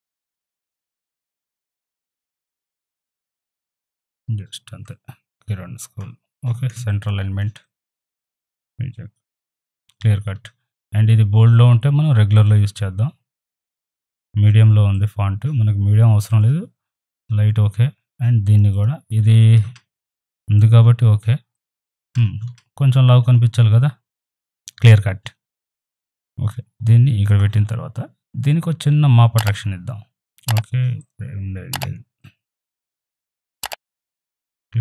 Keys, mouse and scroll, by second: 1.0 alt+click, 2.1-2.6 typing, 2.8-6.8 drag, 6.8 space, 6.9 click, 7.3 space, 12.3 click, 18.5 click, 21.5 click, 25.7 right click, 25.8-29.5 drag, 29.5 right click, 30.2-34.8 drag.